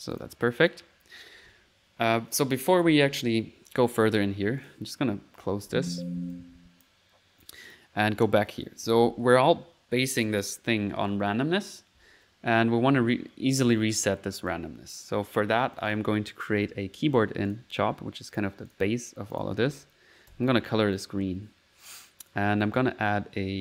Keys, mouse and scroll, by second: 0.1 click, 2.6 click, 4.6 click, 6.3 alt+z, 6.3 alt+click, 7.4 alt+click, 15.8 click, 16.3-17.1 typing, 17.5 click, 18.3-19.8 drag, 20.1-21.2 typing, 20.9 click, 22.2 click.